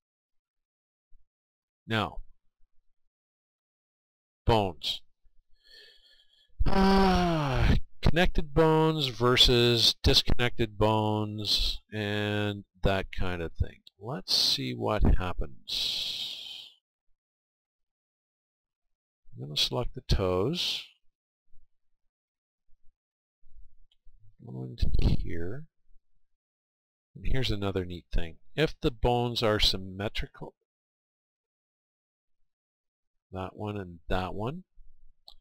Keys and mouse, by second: 2.1 middle click, 3.5-6.0 middle drag, 10.5-12.8 middle drag, 20.1-22.0 right drag, 29.7-32.4 middle drag.